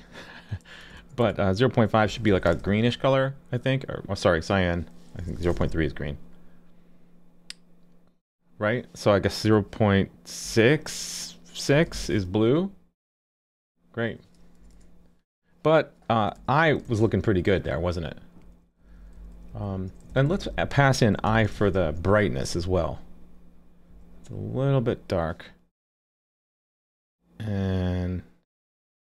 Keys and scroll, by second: 2.6 super+s, 5.5 super+s, 11.9 super+s, 16.9 super+s, 21.5 super+s.